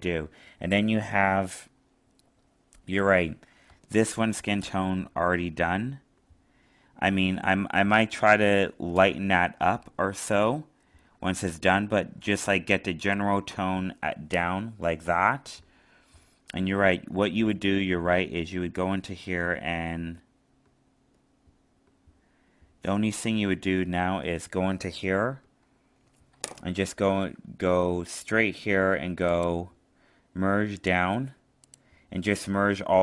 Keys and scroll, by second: 11.4 alt+space.